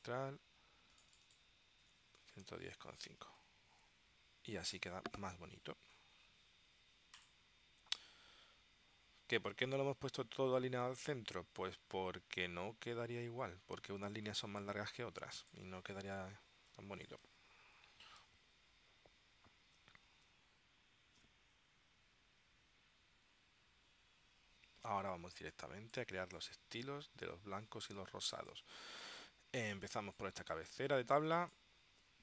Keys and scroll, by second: 2.1-3.7 typing, 20.2 super+s, 25.5 space, 30.0 space.